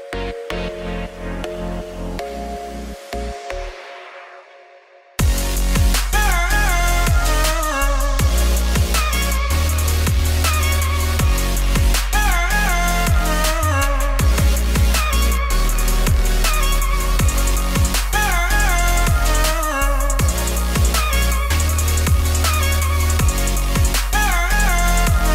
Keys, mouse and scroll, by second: 0.2-4.4 drag, 4.4 scroll down 1, 4.6 click, 5.1 middle click, 5.3 scroll up 2, 5.5 click, 5.8-6.9 drag, 6.9 scroll down 2, 7.2 ctrl+p, 7.7 scroll up 1, 8.0 click, 8.2 click, 8.3 middle click, 8.5 s, 9.0 g, 9.8 ], 10.1 alt+d, 11.3 alt+d, 11.8 r, 12.4 KP_3, 12.8 middle click, 13.0 g, 14.0 click, 14.4 r, 15.4 click, 15.9 click, 16.5 g, 17.3 scroll down 2, 17.6 click, 17.7 middle click, 17.8 scroll down 1, 18.0-19.5 shift+middle drag, 19.5-20.6 scroll up 2, 20.6-21.1 scroll up 2, 21.1 click, 21.3 g, 23.0 click, 23.2 click, 23.4 click, 24.0 click, 24.2 click, 24.5 shift+middle click, 24.7-25.3 scroll up 3.